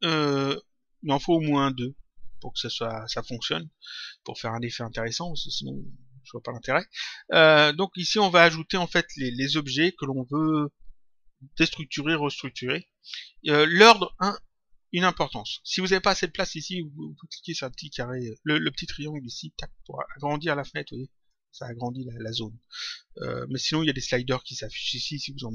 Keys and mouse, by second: 19.2 click, 21.2 click, 23.5 click.